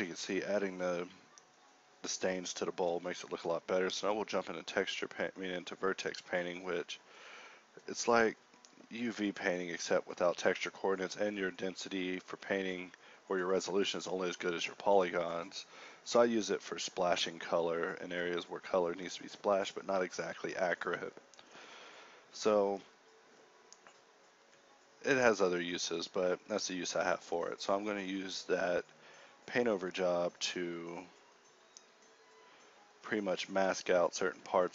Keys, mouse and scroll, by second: 3.7 f, 7.2-9.6 drag, 11.1 t, 12.1-12.9 s, 13.7 s, 21.3 KP_0, 23.3 n, 23.4 t, 26.0 g, 26.6 shift+a, 30.5 g, 30.6 shift+a, 32.2 click, 33.9 g.